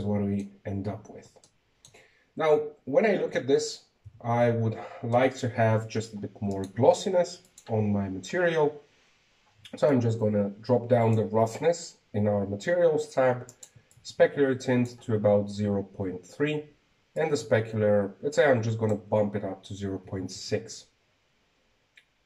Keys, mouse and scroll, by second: 0.8 shift+z, 2.0-3.8 middle drag, 4.5-6.1 shift+middle drag, 6.1 z, 6.5 z, 7.2-8.6 shift+middle drag, 8.6 right click, 9.5 click, 11.9-14.9 drag, 15.1-15.7 drag, 16.0-19.0 drag, 19.2-22.0 drag, 22.0 shift+z.